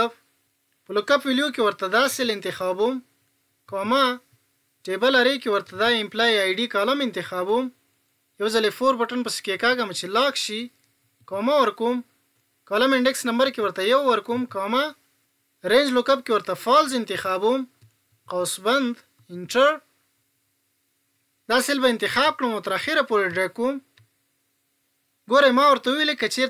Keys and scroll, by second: 8.4 F4.